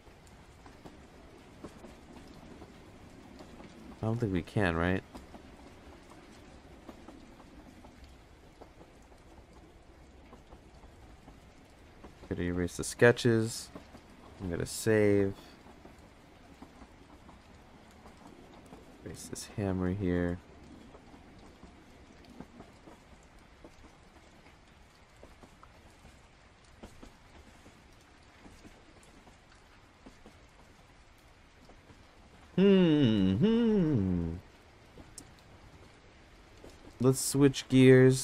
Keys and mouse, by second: 2.9-3.9 drag, 4.3-5.2 drag, 7.1-7.5 drag, 8.3-8.9 drag, 10.7 click, 11.1 click, 12.1 click, 14.2 ctrl+s, 17.6 click, 18.1 click, 18.6 click, 19.1 click, 35.5 click, 35.9 click, 36.2 click, 36.5 click, 36.8-37.9 drag.